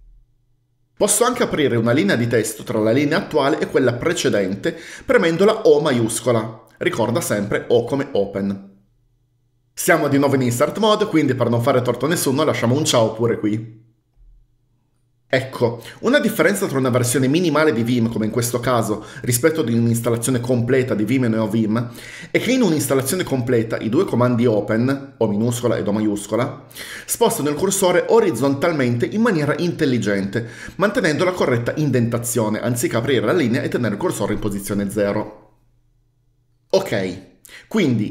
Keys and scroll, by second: 6.1 shift+o, 12.7-13.8 typing.